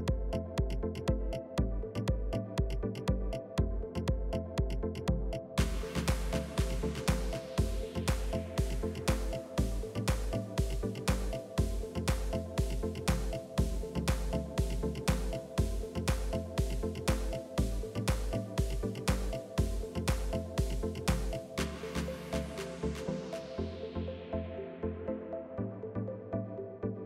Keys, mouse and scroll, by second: 0.9 s, 2.2-3.4 middle drag, 3.4 KP_3, 4.6 ctrl+r, 5.6 s, 7.4 click, 7.8 s, 11.3 s, 14.1 middle click, 14.8 click, 15.6 e, 17.4 KP_3, 18.8 click, 19.4 g, 23.1 middle click, 23.9 click, 24.4 click, 25.6 Delete, 25.9 middle click, 26.9 KP_3.